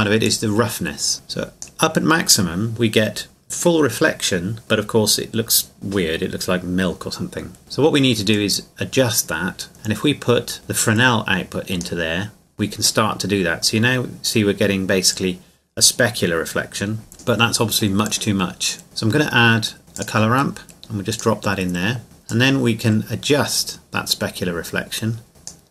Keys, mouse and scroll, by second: 0.2 click, 8.3 click, 17.1 click, 20.0 click, 22.6-25.7 drag.